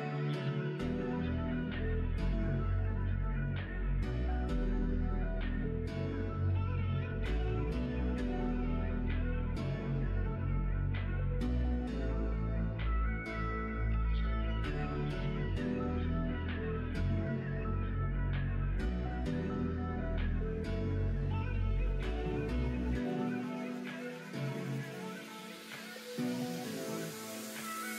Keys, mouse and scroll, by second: 1.7 scroll up 1, 1.8 middle click, 3.1 shift+click, 4.0 g, 5.6 scroll up 1, 6.0 ctrl+r, 7.4 ctrl+r, 8.4-10.0 middle drag, 10.7 shift+middle click, 11.7 middle click, 12.5 click, 12.8 middle click, 13.7 click, 15.2 shift+click, 15.7 middle click, 16.7 e, 19.3 e, 20.0 click, 20.8 middle click, 23.1 middle click, 25.4 middle click.